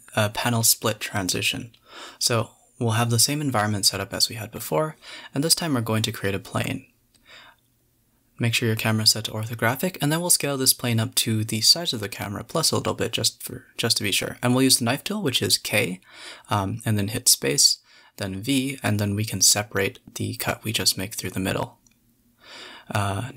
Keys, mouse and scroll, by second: 0.5 click, 1.7 click, 2.1 click, 3.5 x, 3.8 shift+a, 5.5 KP_7, 5.9 ctrl+alt+KP_0, 6.8 click, 7.6 click, 8.0 click, 8.1-9.3 drag, 9.5 s, 10.9 s, 12.5 Tab, 13.2 a, 13.3 a, 13.5 k, 17.1 v, 19.5 a, 19.6 p, 20.6 click, 20.7 Tab, 20.9 click, 21.1 g, 22.1 shift+click, 22.7 click, 23.1-23.3 middle drag.